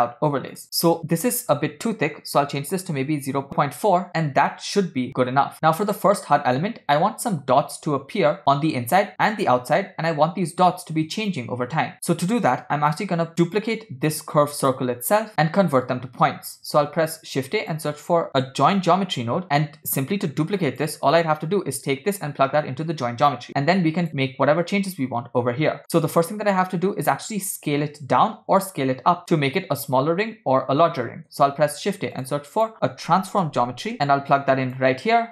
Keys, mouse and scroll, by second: 0.6 click, 0.7-1.2 scroll up 3, 1.2-3.5 drag, 5.2-5.5 scroll down 2, 6.1-6.6 shift+middle drag, 12.0 middle click, 12.0-13.1 scroll down 2, 13.6 click, 14.7 click, 16.7 shift+a, 20.6 click, 21.9-24.1 drag, 25.8 click, 25.8 middle click, 31.5 shift+a.